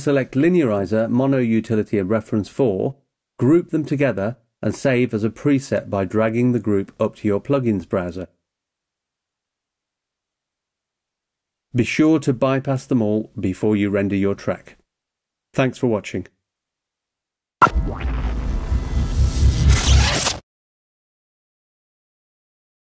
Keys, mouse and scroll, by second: 4.4 right click, 6.8 click, 12.0 click, 16.4 click.